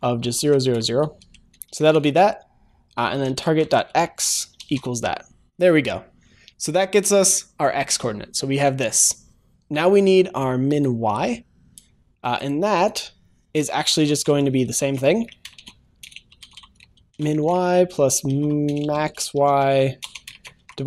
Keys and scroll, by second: 1.7 ctrl+s, 4.5 ctrl+s.